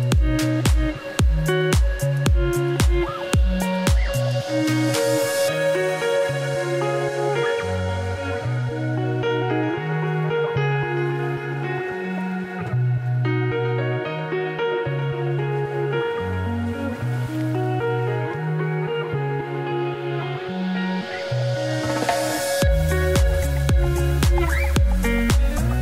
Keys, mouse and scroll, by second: 0.0 shift+middle click, 0.2 scroll up 4, 0.3 Tab, 0.4 2, 0.6 click, 0.9 ctrl+b, 2.4 Tab, 3.6 a, 4.5 u, 4.8 Tab, 5.2 Tab, 5.5 click, 6.6 a, 7.1 3, 7.5-8.4 scroll down 3, 8.4 KP_Divide, 8.9 click, 9.0 middle click, 9.2-12.7 typing, 9.8 click, 10.3 middle click, 10.5 click, 11.0 middle click, 11.2 click, 11.8 middle click, 12.9 middle click, 13.1 Tab, 13.2-14.0 scroll up 1, 14.0 KP_Divide, 14.4 scroll down 1, 14.6 shift+middle click, 15.0 click, 15.3 shift+click, 16.4 ctrl+l, 16.8 z, 17.0 shift+middle click, 17.6 shift+middle click, 17.8 click, 18.5-20.2 drag, 20.2-21.3 right drag, 21.3-22.4 shift+drag, 23.4-24.5 drag, 24.5-25.1 scroll down 3, 25.1 z, 25.5 click.